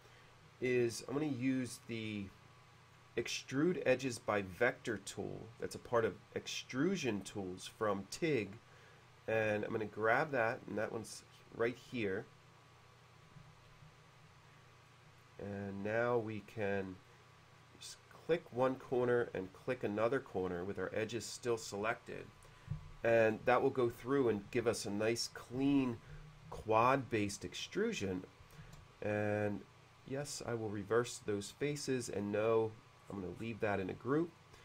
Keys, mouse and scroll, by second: 1.9-3.0 drag, 8.2 click, 13.9 u, 14.9 middle click, 17.1 click, 20.5 click, 27.2 middle click, 28.6 space, 30.4 click, 31.9 click, 33.0 middle click, 33.1-33.7 scroll down 1, 34.1 click, 34.3 click.